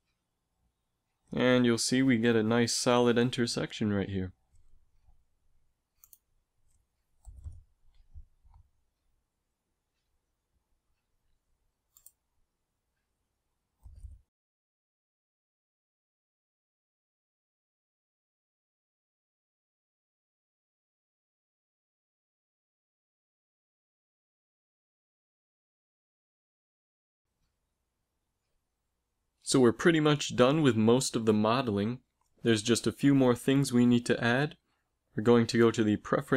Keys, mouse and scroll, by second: 0.2 g, 7.5 middle click, 11.5 Tab, 12.7 a, 20.4 ctrl+s, 26.7 n, 34.5 ctrl+alt+u.